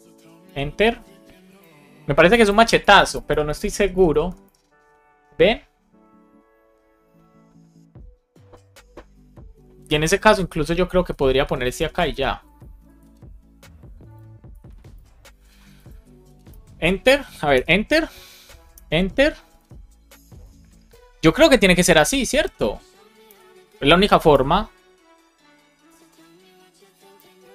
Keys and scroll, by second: 0.4 Return, 1.6 Return, 11.1 alt+Down, 12.8 super+s, 14.4 alt+shift+f, 14.9 super+s, 16.4 Return, 17.5 Return, 18.7 Return, 22.0 Return, 23.2 Return, 25.8 Return, 27.1 Return.